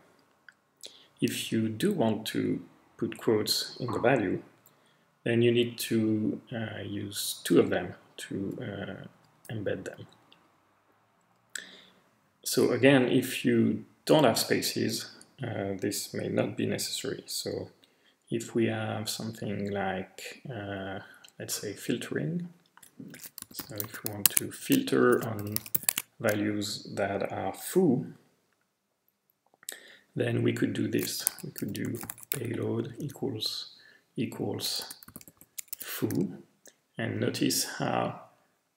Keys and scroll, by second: 7.5-9.3 typing, 20.5 BackSpace, 21.0-21.4 BackSpace, 23.2-26.2 typing, 27.7-28.4 typing, 31.0-33.4 typing, 34.6-36.2 typing.